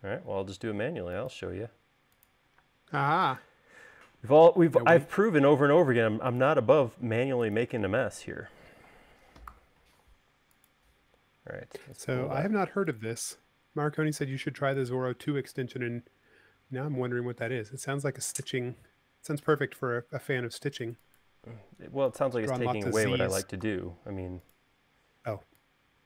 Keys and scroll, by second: 2.8 space, 9.7 v, 14.4 space, 23.8 v.